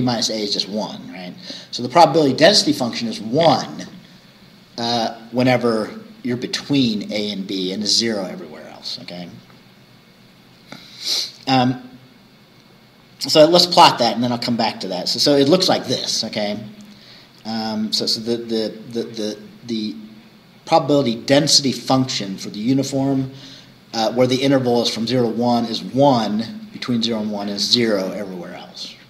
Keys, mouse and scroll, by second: 9.7-10.0 scroll down 2, 13.1-14.3 scroll down 2, 14.3-15.2 scroll down 3.